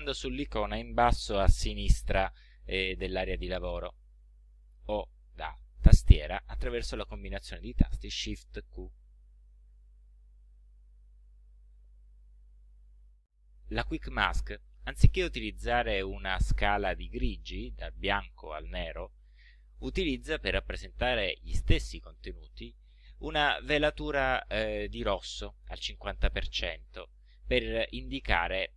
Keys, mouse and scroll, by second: 3.2 click, 9.0 shift+q, 10.6 shift+q.